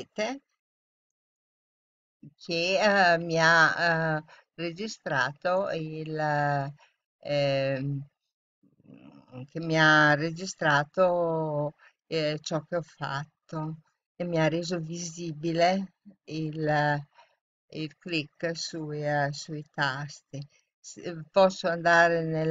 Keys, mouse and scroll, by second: 1.1-2.9 drag.